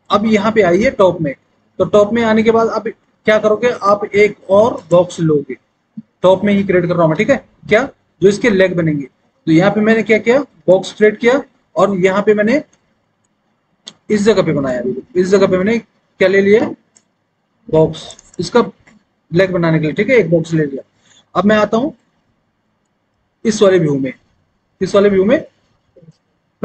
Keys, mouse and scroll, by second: 0.6 alt+w, 22.0 alt+w, 23.2 alt+w.